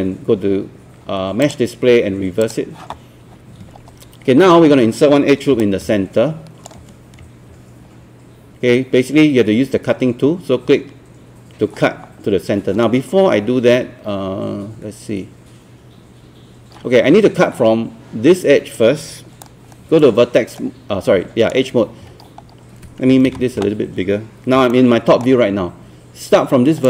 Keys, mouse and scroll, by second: 1.5 click, 5.6 shift+right click, 19.4-21.5 right drag, 22.1-22.4 scroll up 1, 23.3 ctrl+space, 24.7 alt+middle click.